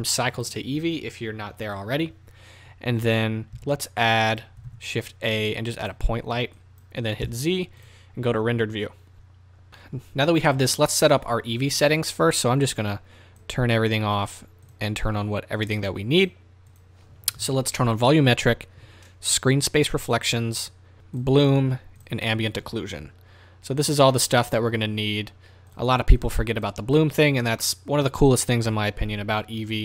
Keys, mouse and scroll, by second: 3.5 z, 4.7 shift+a, 7.2 z, 9.7-13.2 middle drag, 9.7 KP_0, 13.2 click, 14.2 click, 15.6 click, 16.4 middle click, 17.9 click, 19.3 click, 22.0 click, 25.7 click, 26.6 click, 27.0 click, 27.6-29.8 middle drag, 28.7 KP_0.